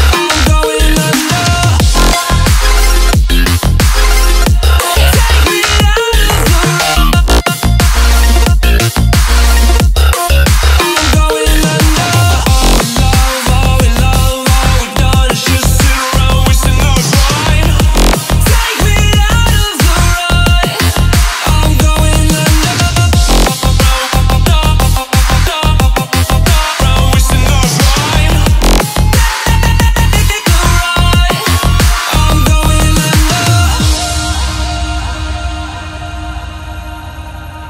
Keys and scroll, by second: 8.3 alt+a, 12.1 ctrl+a, 13.7 alt+a, 18.3 alt+a, 22.8 alt+a, 26.3 alt+a, 37.4 alt+a.